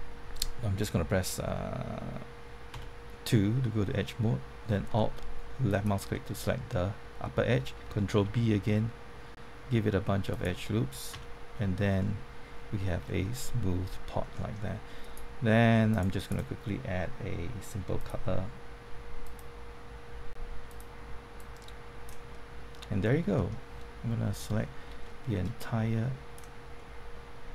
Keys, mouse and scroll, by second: 1.2-2.5 middle drag, 2.7 2, 5.7 alt+click, 6.4-7.5 middle drag, 8.2 ctrl+b, 10.3 click, 11.1 Tab, 11.9 middle click, 13.0 scroll down 1, 13.2 middle click, 15.0 right click, 15.9 click, 22.3-24.3 middle drag, 24.3 scroll down 1, 24.5 middle click, 25.5 click, 26.7 middle click.